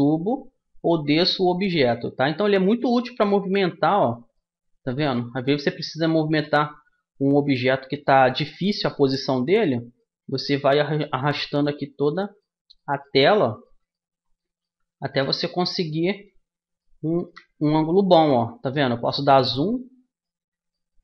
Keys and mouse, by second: 3.6-17.0 middle drag.